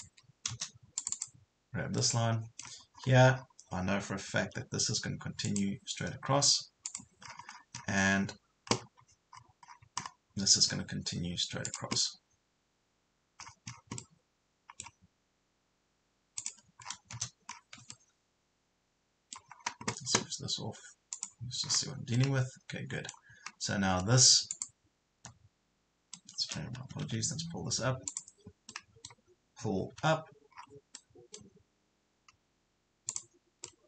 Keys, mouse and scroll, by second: 0.1 Escape, 1.0 click, 2.0 middle click, 2.9 scroll up 1, 4.5 scroll up 1, 5.5 click, 7.3-7.7 scroll down 2, 9.3 scroll up 1, 10.7-11.7 scroll down 1, 11.7 click, 11.9 scroll down 1, 14.0-15.3 middle drag, 16.4 click, 16.9 scroll down 1, 17.9-19.3 middle drag, 19.7 scroll down 1, 21.1 click, 21.6 scroll down 1, 22.1-23.3 middle drag, 24.5 click, 25.2 Delete, 26.3 middle click, 26.4 middle click, 27.1 ctrl+z, 27.5-28.1 scroll up 1, 28.1 click, 28.7 middle click, 30.0 p, 30.5 scroll down 1, 30.9 middle click, 31.7 scroll up 1, 33.1 click, 33.7 middle click.